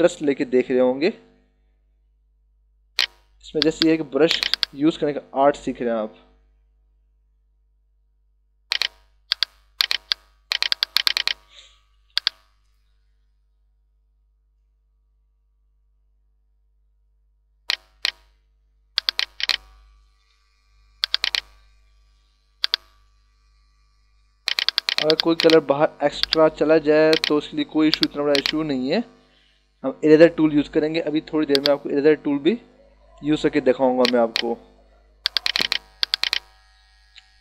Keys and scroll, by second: 11.3 [, 21.3 space, 26.1 h, 27.6 b, 29.6 ].